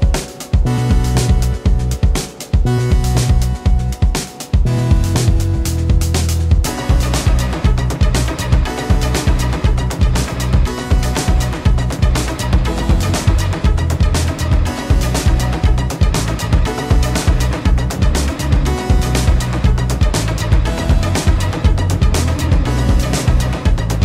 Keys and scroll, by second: 0.0 ctrl+space, 10.0 ctrl+space.